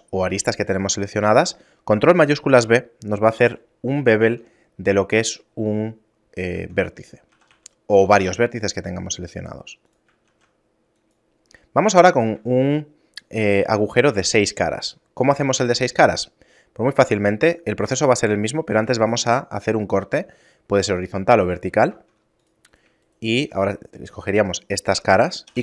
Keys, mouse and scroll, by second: 0.6 shift+middle click, 6.2 Tab, 7.0 a, 7.7 g, 10.0 shift+a, 11.2 middle click, 11.7 shift+middle click, 12.0 Tab, 12.8-13.2 scroll up 2, 13.4 middle click, 16.6 ctrl+r, 21.6 ctrl+Tab, 22.4 right click, 22.8 shift+right click, 25.2 i.